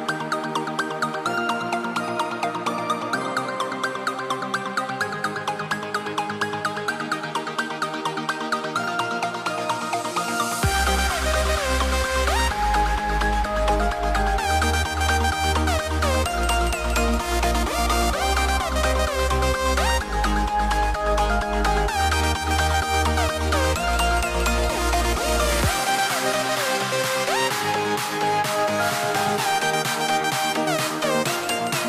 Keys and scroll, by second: 0.8 super+z, 1.8 super+z, 14.9 shift+x, 19.4 shift+m, 21.9 shift+x.